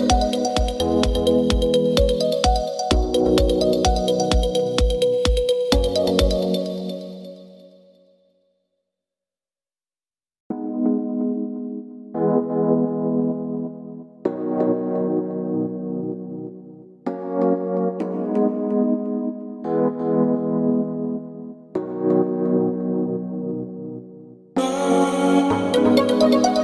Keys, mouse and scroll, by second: 4.4 shift+z, 6.8 alt+shift+z, 7.5 middle click, 11.7 click, 13.9 click, 17.8 click, 19.2-24.2 drag, 24.2 middle click, 24.8 scroll up 1.